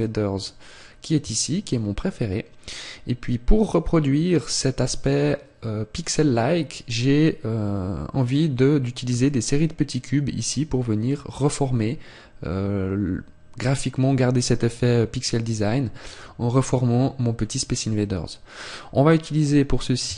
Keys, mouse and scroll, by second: 1.6 shift+click.